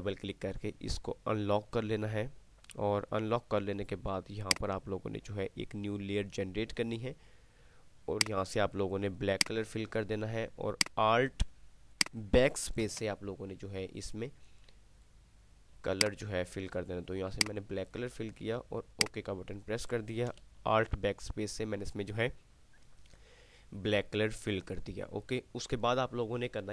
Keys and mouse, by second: 4.6 click, 8.3-11.0 drag, 10.0 click, 13.0 alt+BackSpace, 15.3-17.1 drag, 20.5 alt+BackSpace.